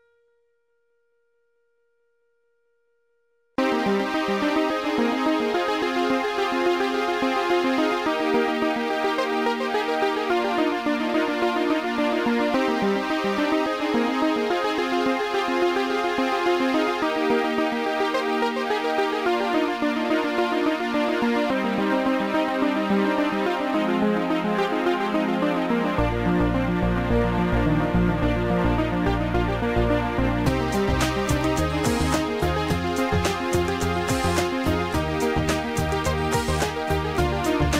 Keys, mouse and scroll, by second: 0.1 shift+click, 1.3 shift+click, 3.7 click, 4.9 right click, 6.1 click, 9.0 click, 11.2 right click, 12.6 click, 19.9 click, 21.9 right click, 23.0 click, 25.0 click, 26.7 Delete, 31.6 Delete, 33.0 right click, 35.9 click, 36.4 right click.